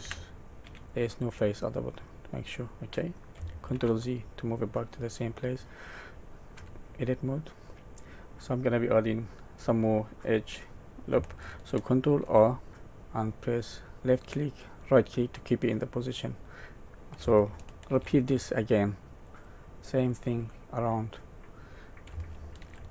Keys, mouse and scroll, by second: 0.0 g, 1.2 middle click, 3.7 ctrl+z, 4.4 middle click, 6.5 Tab, 7.4 middle click, 12.2 ctrl+r, 15.6 middle click, 17.9 ctrl+r, 20.5 middle click, 22.6 ctrl+r.